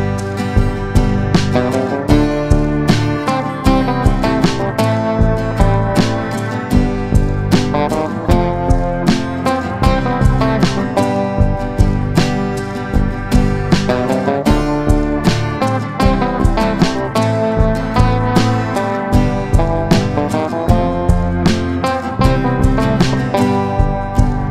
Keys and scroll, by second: 0.8 space, 1.7 Delete, 10.1 shift+F11, 19.9 Escape, 22.5 c, 22.6 e.